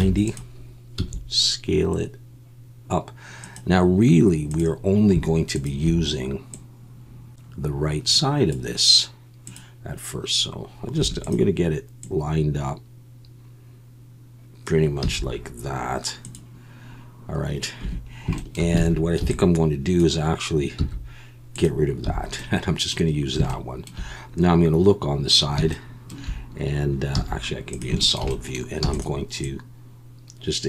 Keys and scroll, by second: 0.0-1.0 typing, 11.0 2, 15.0 z, 17.8 1, 18.8 alt+a, 19.2 b, 20.8 x, 22.1 a, 27.2 z, 28.8 e.